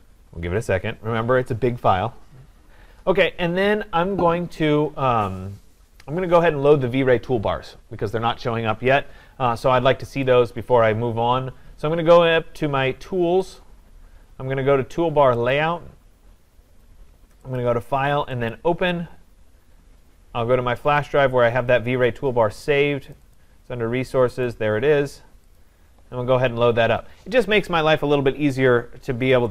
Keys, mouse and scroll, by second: 10.3-13.6 drag, 15.5 click, 17.6 click, 18.5 click, 21.0 click, 23.1 click, 23.4 click, 24.5 click, 25.6 click.